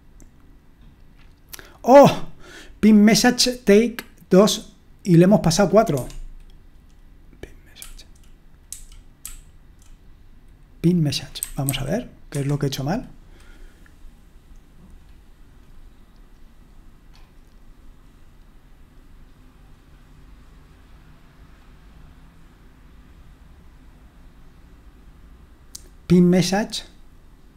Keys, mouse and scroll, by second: 5.9 Escape, 8.5-9.2 typing, 11.7 typing, 12.3 Escape.